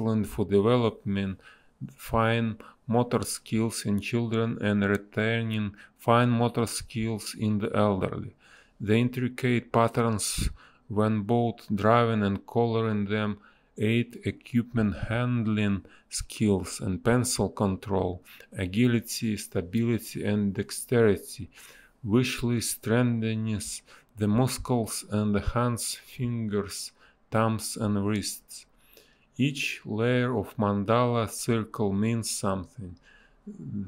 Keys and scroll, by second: 3.1 space, 4.2 ctrl+z, 6.4 ctrl+z, 8.7 a, 11.7 space, 13.2 space, 16.6 space, 17.8 space, 20.1 space, 20.2 b, 24.9 space, 27.3 a, 32.1 space, 32.8 space.